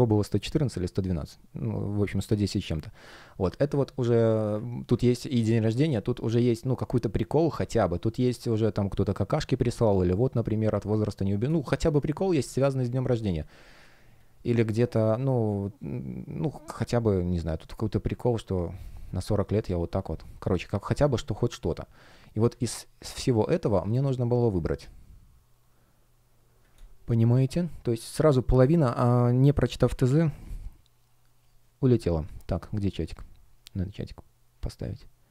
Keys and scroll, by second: 5.2 space, 10.7 space, 12.7 space, 19.6 space, 22.1 super+space, 23.1 space, 24.3 space.